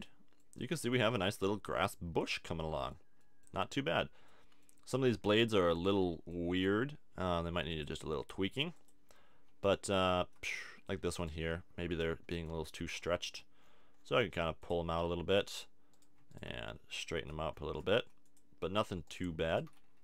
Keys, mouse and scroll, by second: 7.7 click, 9.0 click, 9.6-10.9 middle drag, 10.2 Tab, 11.2-14.5 middle drag, 13.3 g, 14.7-15.9 drag, 15.9 middle click, 16.6 click, 16.6 g.